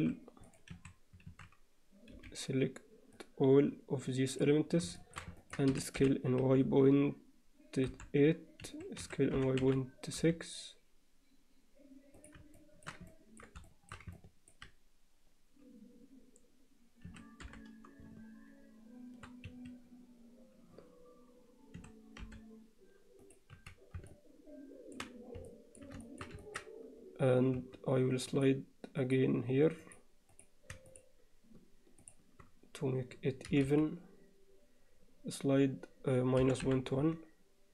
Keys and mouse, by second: 0.5 click, 0.8 a, 1.3 alt+a, 2.2 b, 5.0 alt+shift+middle click, 5.4 ctrl+alt+middle click, 5.8 s, 9.0 s, 12.6 shift+middle click, 13.1-13.4 ctrl+alt+middle drag, 13.7 alt+shift+middle click, 14.2 ctrl+middle click, 17.1 s, 21.8 s, 23.6 z, 24.1 alt+middle click, 25.5 alt+middle click, 26.1 shift+middle click, 26.4 ctrl+alt+middle click, 27.6 2, 28.4 click, 29.0 click, 29.9 click, 30.9 shift+click, 33.5 g.